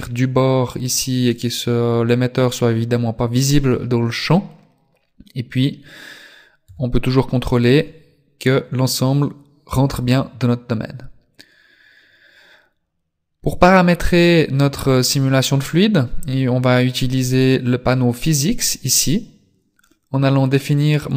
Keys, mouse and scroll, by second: 6.7 KP_3, 17.2 click, 21.0 right click.